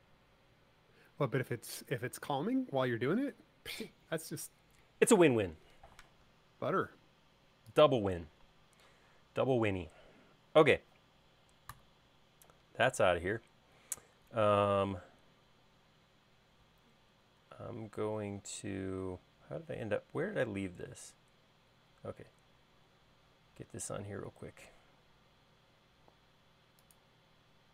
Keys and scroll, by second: 11.7 BackSpace, 24.9 i.